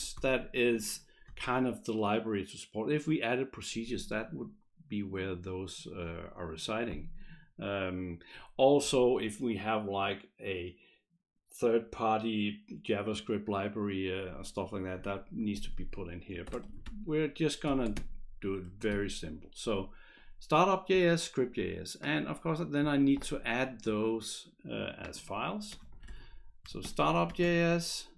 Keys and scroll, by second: 0.0-0.1 typing, 16.2-18.9 typing, 18.6 Right, 25.6-27.7 typing.